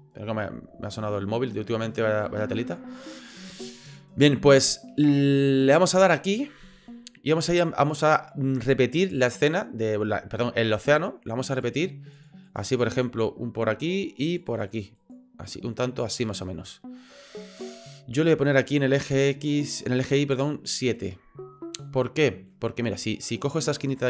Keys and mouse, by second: 12.7 click, 12.9 click, 14.3 click, 14.5 click, 14.7 click, 14.9 click, 20.3 click, 21.8 middle click.